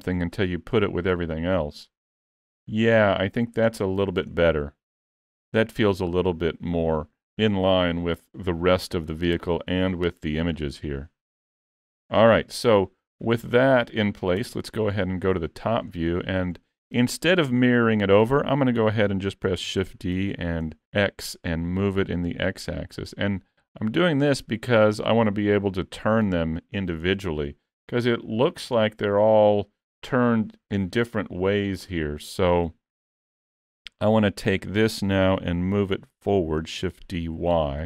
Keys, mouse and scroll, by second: 0.2 shift+middle click, 1.8-2.4 scroll up 3, 2.5 middle click, 3.9 shift+middle click, 4.4 middle click, 9.3-10.4 scroll down 1, 10.5-10.9 scroll down 4, 10.9 shift+middle click, 13.0 click, 14.4 KP_7, 15.2-15.5 scroll up 4, 15.5 shift+middle click, 15.9-16.3 scroll up 3, 16.3 shift+middle click, 19.8 shift+d, 27.7-28.5 scroll down 8, 28.8 shift+middle click, 33.3 scroll down 4, 33.7 shift+middle click, 36.9 shift+d.